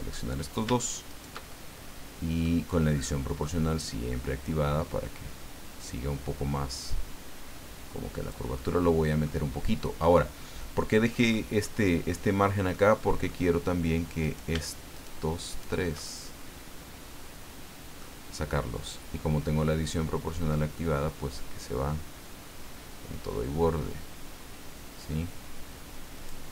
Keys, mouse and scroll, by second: 1.1 shift+right click, 1.5-2.6 shift+middle drag, 3.5-4.7 drag, 4.7 scroll down 1, 8.6 middle click, 10.8-11.8 middle drag, 11.8-12.1 scroll up 1, 12.7 middle click, 14.2 right click, 14.9 shift+right click, 15.5 shift+right click, 16.1-18.1 shift+middle drag, 18.9-26.4 drag.